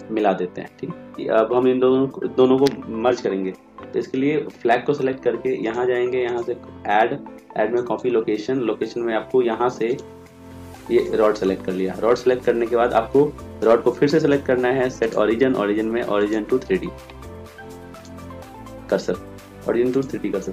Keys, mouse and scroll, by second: 10.0-13.7 drag.